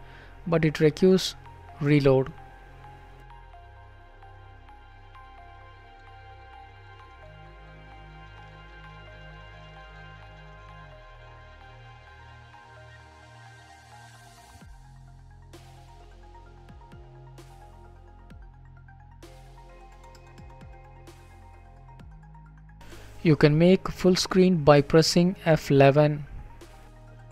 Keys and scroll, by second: 21.5 ctrl+b, 22.9 ctrl+b, 24.4 F11.